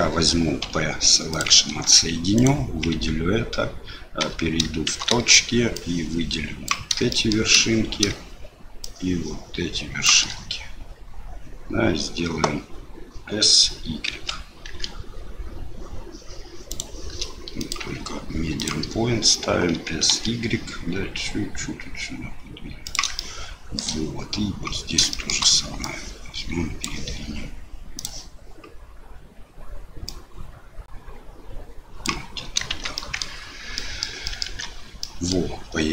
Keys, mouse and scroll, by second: 0.6 p, 1.7 Tab, 2.4 click, 2.9 Tab, 4.2 1, 4.9 shift+z, 5.7 click, 7.1 shift+middle click, 8.8-10.0 shift+drag, 14.1 s, 17.7-18.7 drag, 19.7 s, 23.3 shift+middle click, 25.2 shift+middle click, 25.8-26.8 drag, 28.0 click, 30.1-32.3 drag, 32.7 shift+z, 33.1 middle click, 33.9 middle click, 34.3 middle click, 34.4 Tab, 35.0 middle click.